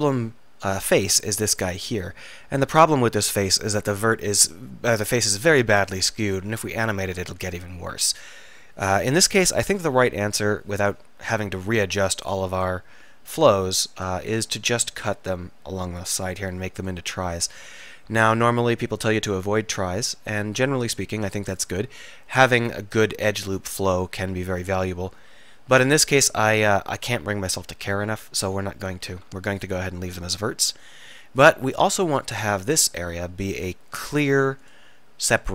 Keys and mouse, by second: 0.5-4.7 drag, 10.2 k, 16.3 k, 21.4-23.3 middle drag, 30.2-31.5 middle drag, 33.4 e.